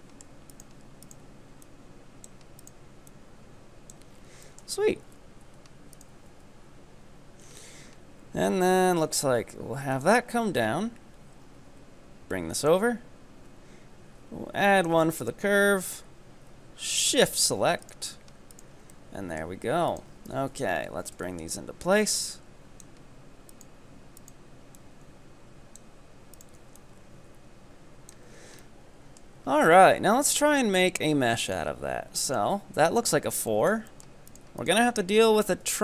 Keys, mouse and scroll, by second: 0.0 shift+middle click, 0.4 middle click, 0.6 scroll up 1, 1.1 ctrl+right click, 1.7-2.7 drag, 2.7 right click, 3.1-4.2 drag, 4.2 scroll down 5, 4.6 shift+middle click, 5.1 Tab, 5.6 Tab, 6.0 right click, 6.6 KP_3, 7.5-8.4 scroll up 6, 8.4 e, 10.3 scroll down 2, 11.6 e, 13.5 e, 15.3 shift+right click, 17.3 f, 17.9-18.6 right drag, 18.9-19.9 middle drag, 19.9 ctrl+right click, 20.5 KP_7, 21.3 shift+middle click, 22.1-23.5 drag, 23.5 right click, 24.2 right click, 24.8-26.4 drag, 26.4 right click, 26.8-28.3 drag, 28.3 z, 28.7-29.5 middle drag, 29.5 scroll down 3, 29.7-32.0 middle drag, 32.0-32.4 scroll up 2, 32.4 ctrl+right click, 33.1 f, 33.6-34.3 shift+middle drag, 34.3 right click, 34.6 ctrl+right click, 35.6 f.